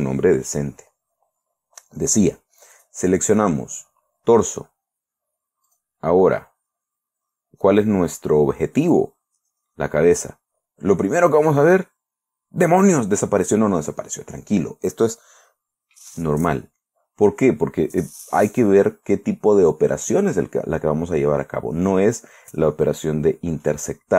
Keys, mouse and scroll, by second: 0.0-0.6 typing, 3.2 right click, 3.7 right click, 6.2 click, 9.3 click, 12.0 click, 14.1-16.6 middle drag.